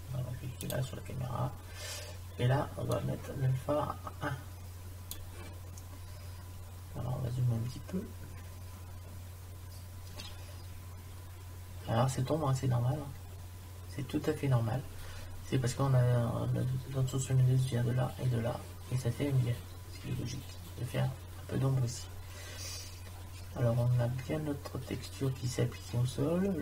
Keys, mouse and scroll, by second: 0.7 click, 6.5 middle click, 7.7 middle click, 8.2 click, 8.4 click, 8.7 middle click.